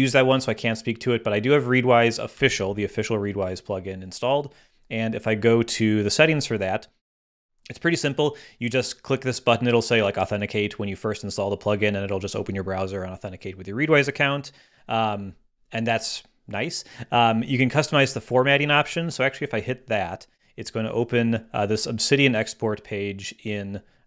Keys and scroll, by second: 2.3 ↺.